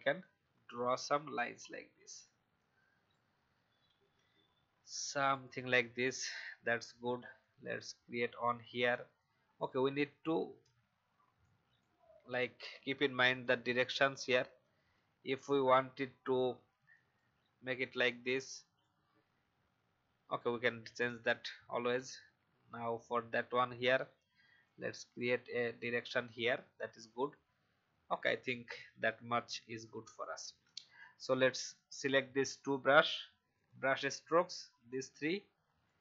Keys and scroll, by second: 1.9 ctrl+z, 3.9 ctrl+z, 8.7 ctrl+z, 10.6 ctrl+z, 14.4 ctrl+z, 18.0 ctrl+z, 29.7 v.